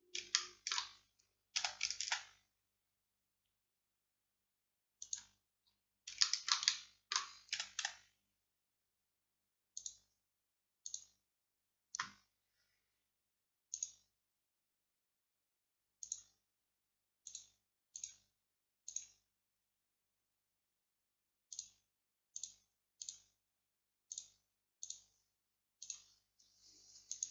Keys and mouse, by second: 1.6 s, 7.6 a, 7.9 a, 13.8-15.5 drag, 15.5-17.3 middle drag, 17.3-19.7 drag, 19.7-21.6 middle drag.